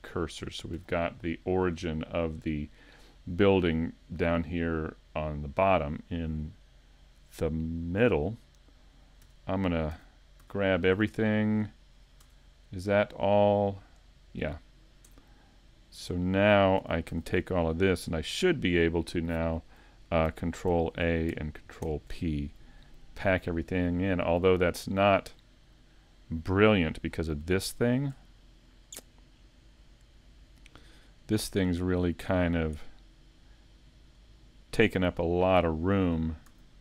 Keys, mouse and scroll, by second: 8.5 right click, 9.2 Tab, 12.2 Tab, 15.1 Tab, 20.7 ctrl+a, 21.9 ctrl+p, 24.7 click, 32.0 scroll down 4, 35.4 click, 35.4 scroll down 1, 36.5 a.